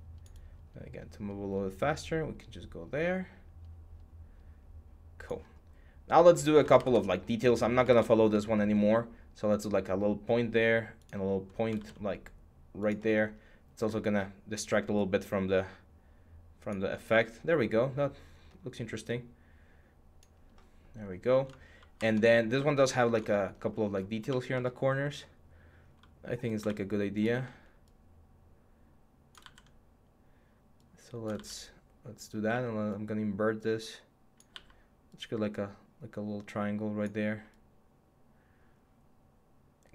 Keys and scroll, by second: 6.6 alt+Tab, 7.7 alt+Tab, 11.6 ctrl+z, 21.8 Tab, 22.8 Tab, 29.2 ctrl+z, 31.1 ctrl+z, 32.3 x, 34.1 x, 37.0 x.